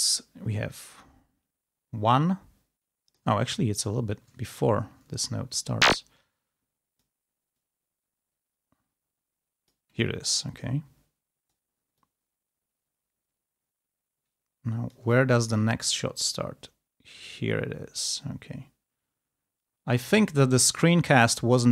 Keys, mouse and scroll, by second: 3.3 ctrl+scroll up 2, 3.8 ctrl+scroll down 2, 4.5 ctrl+scroll up 2, 5.3 ctrl+e, 5.8-7.2 drag, 7.4-9.8 drag, 10.3 g, 10.4-11.6 drag, 11.8-15.1 drag, 15.1 ctrl+scroll down 2, 15.9-20.0 ctrl+drag, 21.0 ctrl+scroll down 2, 21.6 ctrl+e.